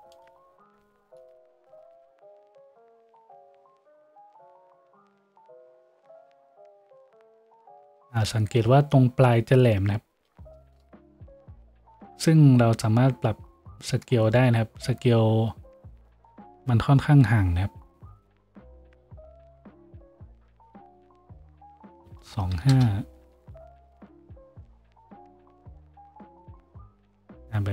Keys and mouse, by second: 0.3-27.7 drag, 1.0 n, 1.7 n, 2.6 F6, 11.5 F6.